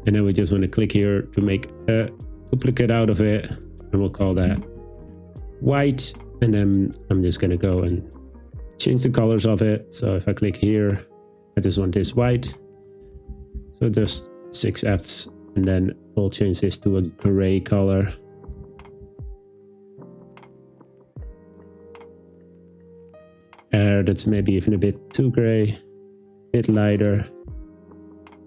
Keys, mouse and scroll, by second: 2.5 click, 3.6-5.1 drag, 7.8 click, 8.4 click, 9.6 click, 10.3 click, 12.5 shift+f, 13.0 shift+f, 13.6 shift+f, 16.4 click, 17.0 click, 18.7 shift+f, 24.2 click, 27.5 Tab.